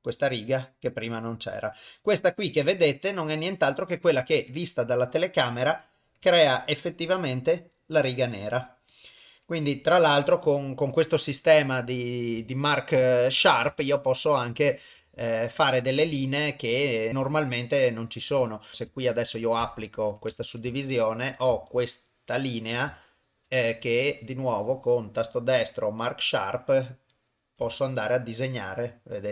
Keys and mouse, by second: 2.9-4.2 middle drag, 4.2 KP_0, 5.2 click, 8.9 click, 11.6 click, 12.3 KP_0, 13.8 shift+middle click, 15.0 Tab, 15.5 middle click, 16.1 shift+middle click, 16.8 middle click, 17.3 shift+middle click, 18.7 Tab, 19.6 ctrl+a, 20.3 Tab, 20.7 shift+middle click, 21.9 alt+click, 22.9 shift+middle click, 23.6-24.9 middle drag, 24.9-27.2 right drag, 27.6 Tab, 28.0-29.3 middle drag.